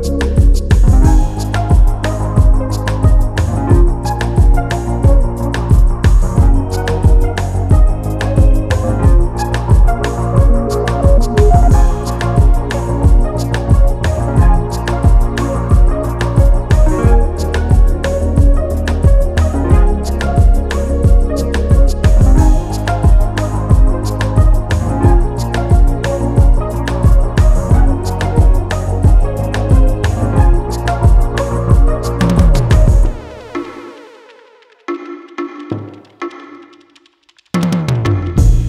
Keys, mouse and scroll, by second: 0.7 click, 1.3-1.7 scroll up 1, 1.7-2.1 scroll down 1, 2.1 click, 3.1 ctrl+s, 3.8 click, 8.0 click, 9.8 click, 10.3 KP_1, 10.6 Return, 12.0 click, 14.8 click, 22.3 scroll up 1, 23.3 click, 23.9-24.5 scroll down 1, 25.0 click, 31.2 click, 31.9 ctrl+d, 32.5 click, 34.6 click, 35.2 Delete, 36.3 click.